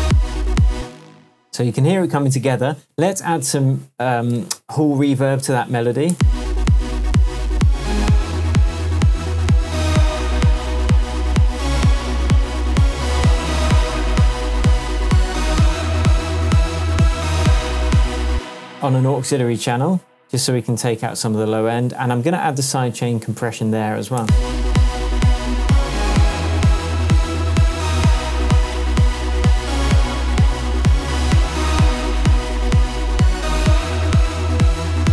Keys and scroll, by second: 0.7 space, 1.1 super+s, 3.2 Tab, 6.1 space, 18.3 space, 18.9 Tab, 23.5 super+v, 24.2 super+space, 27.0 Tab, 33.2 Tab.